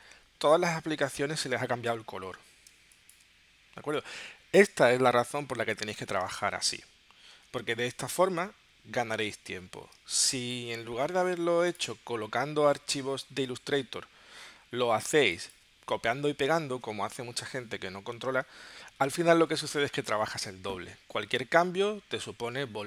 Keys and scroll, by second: 2.7 space, 6.7 super+y, 7.3 super+y, 10.0 space, 15.2 space.